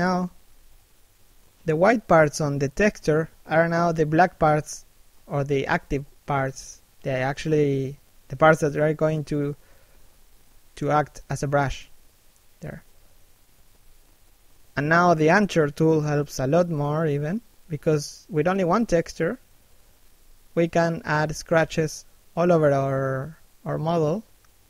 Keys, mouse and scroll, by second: 1.0 f, 2.4 right click, 2.7 click, 5.2 middle click, 8.2 shift+click, 10.7 middle click, 11.3 middle click, 12.3-12.7 scroll down 1, 12.9 middle click, 13.7 shift+middle click, 14.8 middle click, 15.2 shift+middle click, 15.6-16.4 scroll up 1, 16.4 f, 18.0 right click, 18.5 ctrl+f, 21.5 click, 23.4 click.